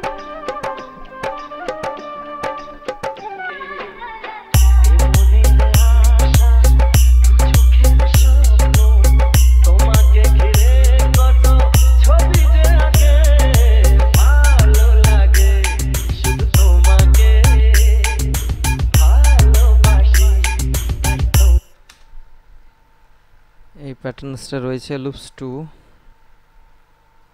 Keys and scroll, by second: 21.9 space.